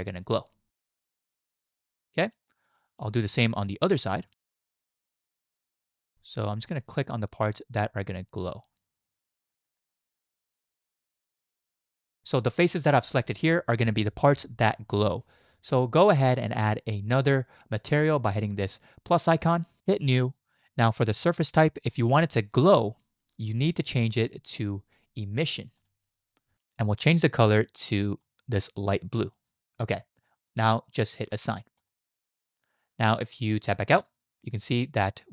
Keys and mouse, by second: 1.3 alt+shift+click, 2.5 shift+click, 3.4 shift+click, 4.5 shift+click, 5.5 shift+click, 6.1 middle click, 6.7 shift+click, 7.2 middle click, 9.0 alt+shift+click, 9.5 alt+shift+click, 9.9 alt+shift+click, 10.2 middle click, 12.0 shift+click, 23.7-25.9 drag, 31.8 click, 34.0 Tab.